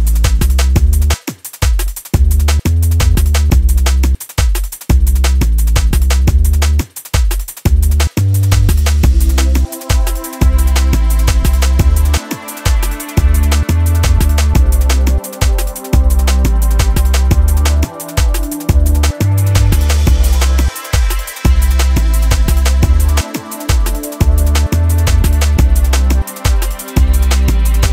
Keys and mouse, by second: 0.0 space, 1.1 click, 1.7 click, 2.8-3.5 drag, 3.9-5.4 drag, 6.1-6.7 drag, 9.5-15.3 alt+drag, 16.5-18.0 alt+drag, 19.1-23.0 alt+drag, 24.6 space.